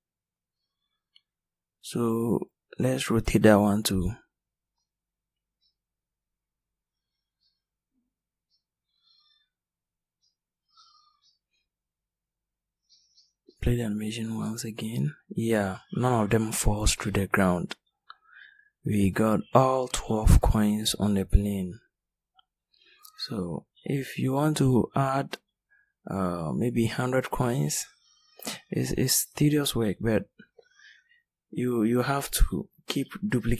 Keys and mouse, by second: 1.9 r, 6.9 r, 25.4-27.0 right drag, 32.4 shift+d.